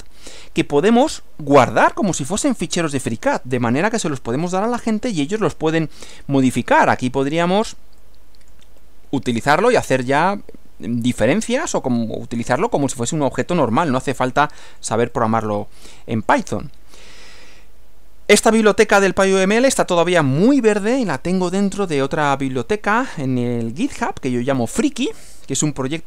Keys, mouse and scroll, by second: 1.0 click, 3.0 click, 3.7-5.2 middle drag, 3.7-4.7 scroll down 1, 4.7-5.2 scroll down 1, 8.1 click, 8.9 click, 11.9-13.2 drag, 14.4 click, 15.1 click, 15.8 click, 18.6 click.